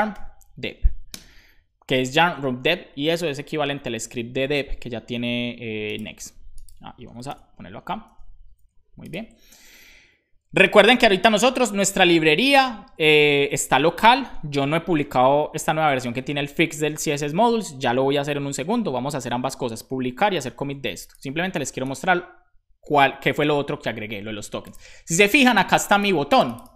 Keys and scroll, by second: 0.1 typing.